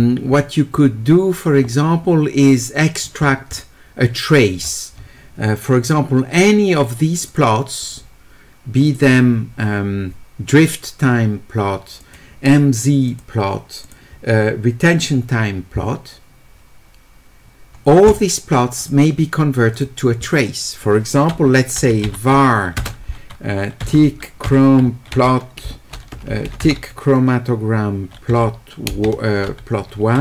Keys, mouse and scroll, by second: 0.3-2.8 middle drag, 3.0-4.3 middle drag, 5.0 middle click, 7.3 click, 7.8 click, 8.9 click, 12.0 click, 13.1 click, 19.8 click, 21.9 q, 22.8 space.